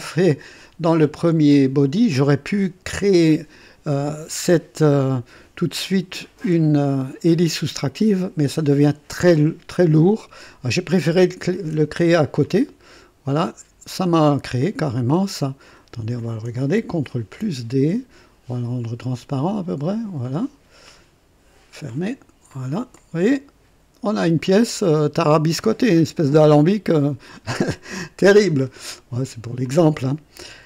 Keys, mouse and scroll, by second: 1.0 scroll up 2, 12.3-15.8 drag, 16.1 click, 17.2 ctrl+d, 18.7-20.3 drag, 20.8 click, 21.8 click, 22.5 click, 22.9-28.5 drag, 28.6 right click, 29.6 click.